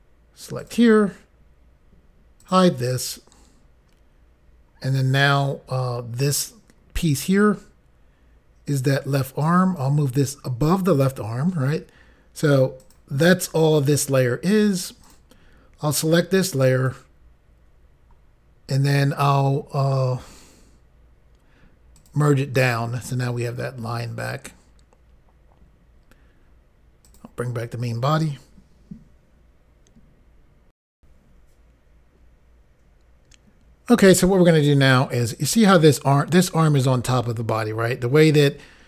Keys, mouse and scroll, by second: 0.7 click, 2.5 click, 9.9 click, 12.9 click, 15.2 click, 22.1 click, 27.2 click, 30.9 Insert.